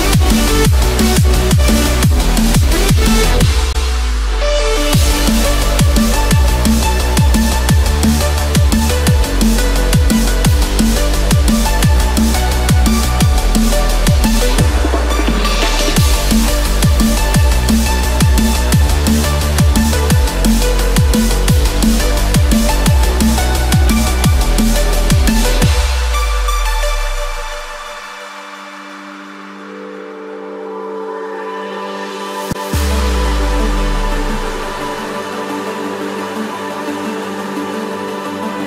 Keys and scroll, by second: 21.4 F4, 24.5 ctrl+=, 25.6 ctrl+=, 28.0 ctrl+=, 31.6 ctrl+-, 33.5 ctrl+-, 34.0 ctrl+=, 36.7 ctrl+=.